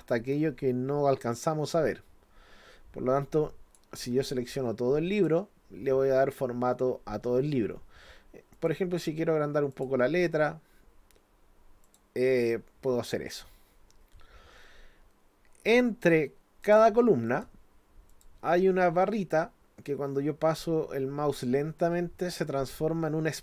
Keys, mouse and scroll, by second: 1.3-3.8 drag, 4.0 click, 5.1 click, 8.5 click, 9.7 click, 11.8 click, 16.6 click, 17.3 click, 18.1 click.